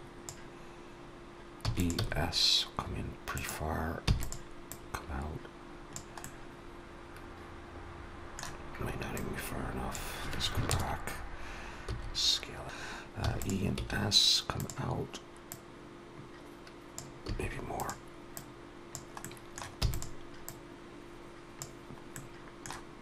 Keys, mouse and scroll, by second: 1.5 e, 1.8 s, 3.9 e, 4.5 click, 6.1 middle click, 9.0 click, 10.5 ctrl+KP_Add, 11.7 s, 12.6 alt+shift+click, 13.1 e, 13.6 s, 15.3 click, 17.1 s, 18.2 click, 19.1 middle click, 19.6 e, 20.3 click, 22.0 middle click.